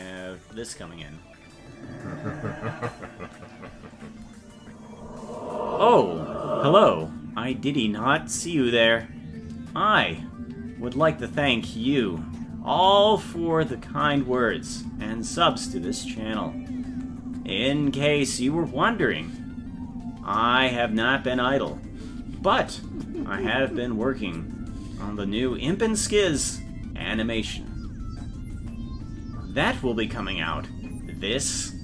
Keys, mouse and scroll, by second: 0.6 space.